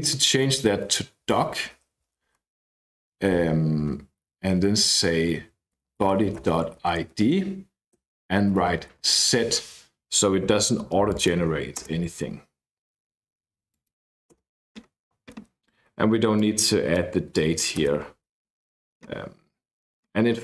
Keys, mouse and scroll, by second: 0.0-1.0 typing, 3.0 shift+9, 5.5-9.5 typing, 11.1 click, 11.8 Return, 13.7 click, 14.3 Return, 16.3 click, 17.7 BackSpace, 19.2-20.0 scroll down 1, 20.0-20.4 scroll up 1.